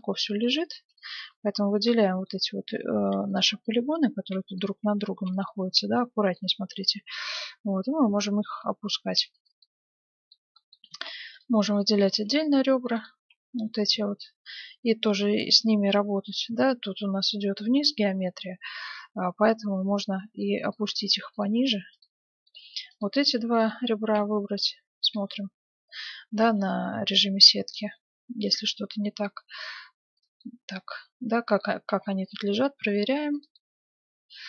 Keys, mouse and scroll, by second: 0.8-2.4 right drag, 1.4-3.6 middle drag, 3.6-5.5 right drag, 3.6 z, 5.0 z, 6.1-7.2 middle drag, 6.6 g, 9.6-12.5 middle drag, 10.9 ctrl+Tab, 11.9-14.7 right drag, 13.6 g, 21.3-26.8 right drag, 21.8 z, 24.1 z, 25.6 z, 26.2 g, 30.4-32.2 middle drag, 31.8 g, 33.5-34.4 middle drag.